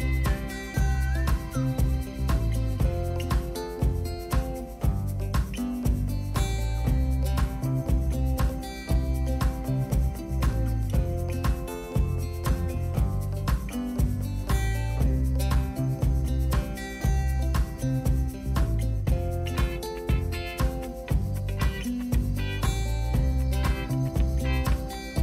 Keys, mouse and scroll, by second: 8.8-9.9 drag, 11.4 click, 12.7-25.2 drag.